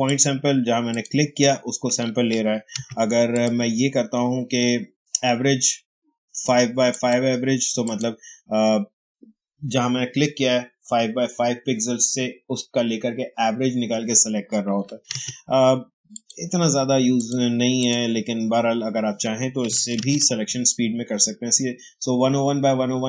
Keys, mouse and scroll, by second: 2.7 ctrl+d, 3.2 click, 3.3 click, 6.8 click, 14.7 click, 15.0 ctrl+d, 16.0 click, 19.6 click, 19.9 ctrl+d.